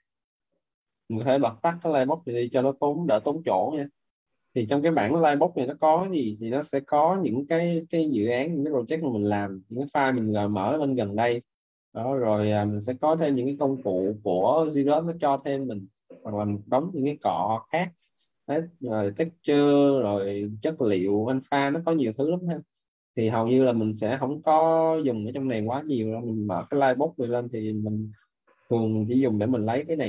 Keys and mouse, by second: 1.2 click, 9.7 click, 16.0 click, 19.0 click, 27.7 click.